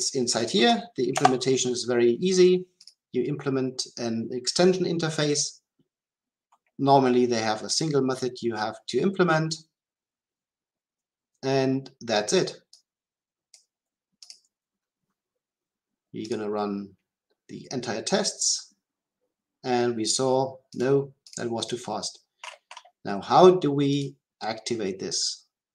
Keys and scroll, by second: 16.3 shift+F10.